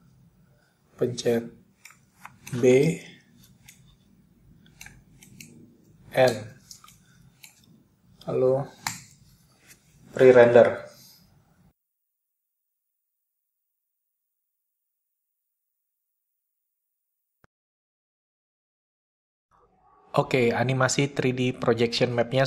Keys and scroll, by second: 2.5 b, 5.4-7.0 typing, 9.5 typing, 10.1 ctrl+0.